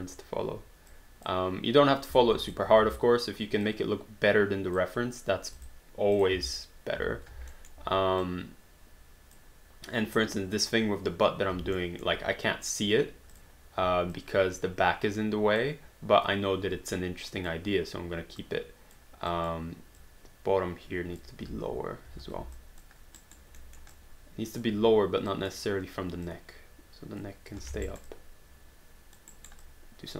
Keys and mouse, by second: 0.9 click, 2.5 shift+click, 2.8 w, 3.7 click, 5.5 q, 5.6 click, 6.3 w, 7.7 alt+middle click, 8.3 click, 11.8 alt+middle click, 13.3 click, 13.8 w, 14.2 click, 17.3 click, 18.5 click, 21.4 space, 22.6 alt+click, 23.2 alt+right click, 23.6 alt+middle click, 24.0 alt+click, 25.4 click, 27.7 alt+d, 27.9 alt+right click, 28.1 alt+click, 29.4 alt+right click, 29.6 alt+click.